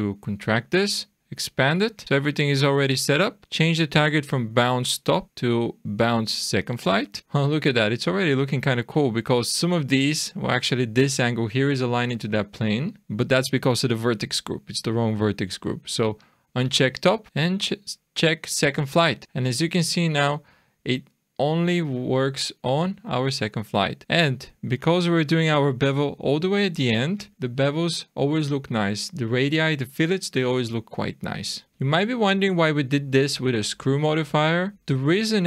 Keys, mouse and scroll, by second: 4.4 click, 5.0 click, 8.1 shift+middle click, 12.7 shift+middle click, 16.3 click, 17.3 click, 19.2 shift+middle click, 23.9-24.8 scroll down 3, 24.8 click, 27.3-28.1 scroll up 5, 30.8-31.3 scroll down 3, 31.7 shift+middle click, 31.9-32.3 scroll up 3, 34.7 click.